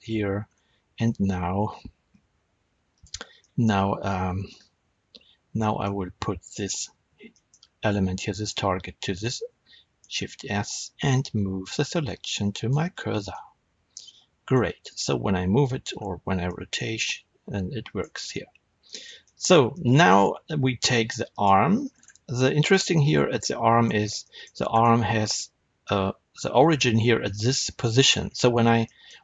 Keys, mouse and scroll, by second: 0.0 Tab, 0.3-1.4 scroll down 2, 1.4 z, 3.3-4.4 shift+middle drag, 4.4 z, 5.5-6.3 shift+middle drag, 6.3 click, 6.9 scroll down 1, 7.2-14.7 shift+middle drag, 9.9 shift+s, 14.7 click, 15.8 r, 17.9 right click, 18.1 scroll down 1, 18.7-21.2 middle drag, 21.2 click, 21.4-29.2 middle drag, 21.8-22.6 scroll up 2, 24.6 scroll up 1, 28.0 scroll down 1.